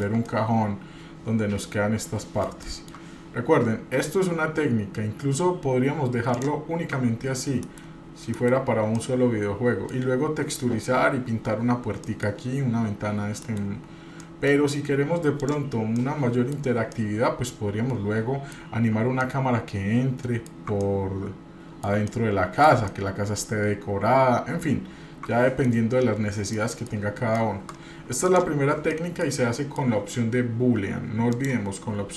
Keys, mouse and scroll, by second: 0.3-2.5 middle drag, 2.6 shift+middle click, 6.3 click, 7.6 KP_Divide, 8.3 KP_Divide, 8.9-9.9 middle drag, 12.0 middle click, 13.4 KP_Divide, 14.2-14.6 middle drag, 14.6-15.4 scroll up 2, 15.4 click, 16.0 middle click, 16.9-18.5 middle drag, 19.2-20.5 ctrl+middle drag, 20.8-21.9 middle drag, 22.0-25.7 ctrl+middle drag, 25.7-26.6 scroll down 4, 26.6 middle click, 27.2 shift+scroll down 1, 27.3-27.8 shift+middle drag, 27.8-28.2 scroll down 1, 28.2 click, 28.9 middle click, 29.6 middle click, 31.3 click.